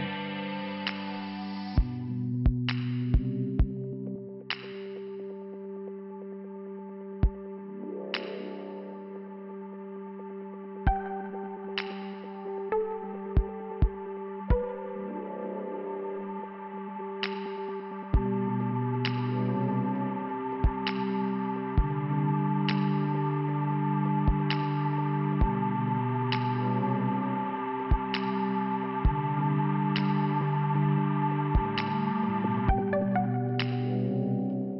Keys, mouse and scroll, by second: 0.5 right click, 1.3 click, 1.5 click, 3.9 click, 4.0 click, 4.4 click, 5.8 click, 5.9 click, 7.4 click, 9.3 click, 9.4 click, 10.4 click, 10.5 click, 10.9 click, 11.0 click, 11.5 c, 11.8 click, 13.3 middle click, 13.9 scroll down 1, 17.3 click, 19.1 click, 19.2 click, 19.9 click, 20.0 click, 20.9 click, 21.0 click, 26.6 click, 26.8 click, 28.7 click, 32.8 click, 33.1 click, 33.8 click.